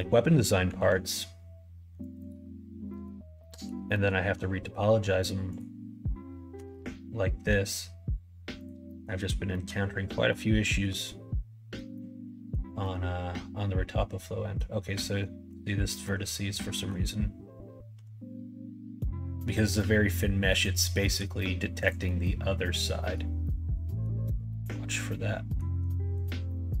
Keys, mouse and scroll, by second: 0.7 ctrl+r, 2.9 click, 3.3 middle click, 3.9 middle click, 5.5 click, 6.5 g, 8.8 middle click, 9.5 middle click, 10.0 scroll up 1, 10.1 middle click, 10.6-11.0 scroll up 2, 10.8 middle click, 11.0 middle click, 11.9 middle click, 12.8-14.5 middle drag, 15.5 click, 16.0 middle click, 17.9 g, 22.0-23.2 middle drag, 23.4 middle click, 24.5-25.6 middle drag, 26.1 click, 26.4 middle click.